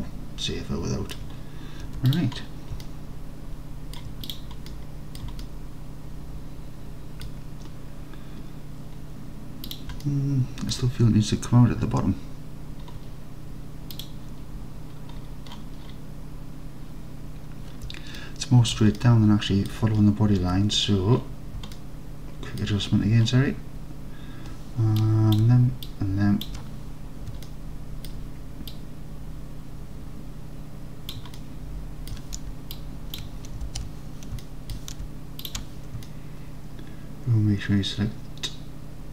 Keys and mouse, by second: 1.9 Tab, 2.2 drag, 2.9-4.0 alt+drag, 5.0 middle drag, 5.5 alt+middle click, 10.1-10.8 alt+drag, 18.2 alt+click, 18.6 alt+click, 19.0-19.5 alt+drag, 19.5 alt+middle click, 20.5 Tab, 21.8 alt+middle click, 25.0 click, 26.0 shift+click, 27.5-28.1 alt+drag, 28.8-31.2 drag, 31.4 alt+click, 32.8 shift+click, 33.7 alt+z, 34.4-34.8 alt+middle drag, 36.1-39.1 alt+middle drag.